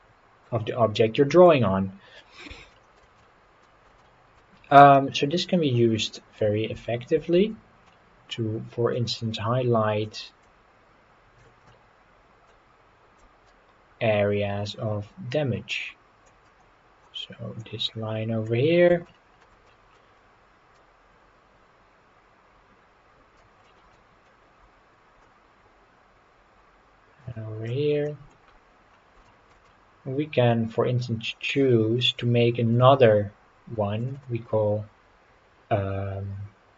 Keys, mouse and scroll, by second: 0.7 middle click, 2.7 shift+middle click, 3.2 middle click, 4.0 shift+middle click, 5.5 scroll up 3, 6.0 scroll down 1, 7.4 ctrl+z, 7.9-8.9 middle drag, 10.0-11.5 drag, 11.7 middle click, 13.2-16.3 drag, 17.6 click, 18.7 scroll down 2, 19.1 shift+middle click, 19.7 middle click, 20.8-23.4 drag, 23.6 middle click, 25.2-27.7 drag, 28.1 middle click, 28.4-29.2 scroll up 5, 29.3 shift+middle click, 29.7-31.5 middle drag, 32.7 click, 34.0 click, 34.2-36.7 drag.